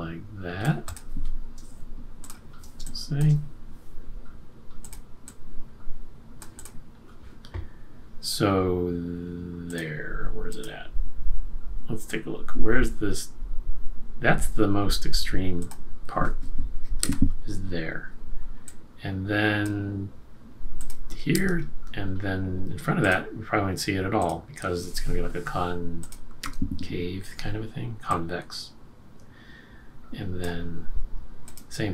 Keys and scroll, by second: 2.8 space, 17.0 F6, 21.3 F6, 26.4 BackSpace.